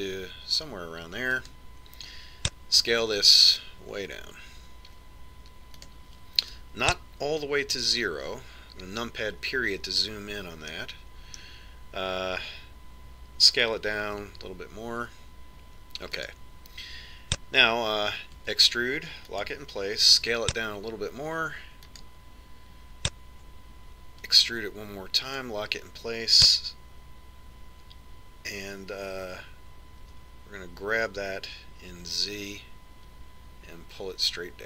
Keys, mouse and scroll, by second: 3.9 s, 8.9 KP_Decimal, 11.8-13.7 middle drag, 15.1 s, 19.5 e, 21.3 s, 25.4 e, 31.2 g.